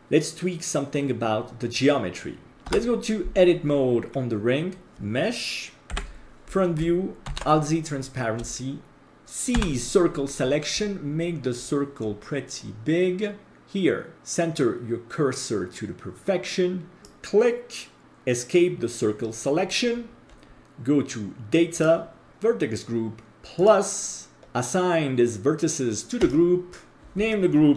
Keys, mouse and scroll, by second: 4.5 Tab, 5.9 KP_1, 7.3 alt+z, 7.9-8.4 scroll up 2, 8.5 shift+middle click, 9.5 c, 21.7 click, 23.5 click, 26.2-27.7 drag.